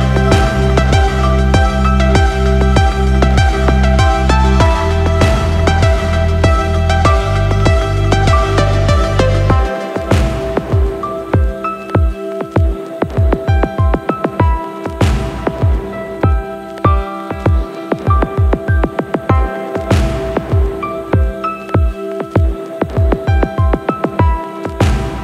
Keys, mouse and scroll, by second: 8.5 click, 9.8 click, 13.2 click, 17.6 click, 18.4 s, 19.4 click, 20.3 click, 23.2 click, 25.1-25.2 drag.